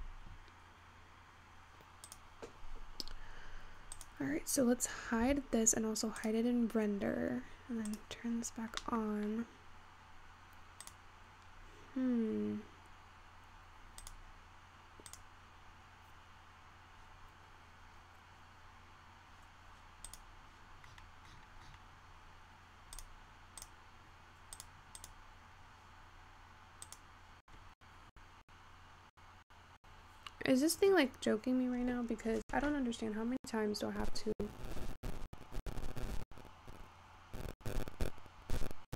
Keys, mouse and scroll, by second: 2.1 click, 3.5-4.0 scroll down 1, 4.0 click, 5.4 h, 6.2 click, 8.0 click, 8.5-8.9 scroll down 3, 8.9-9.4 middle drag, 9.4-10.9 scroll up 1, 10.9 click, 11.5-13.7 scroll down 4, 13.7-14.1 scroll down 4, 14.1-18.3 drag, 20.1 click, 20.9-23.0 scroll down 41, 23.0-30.3 drag.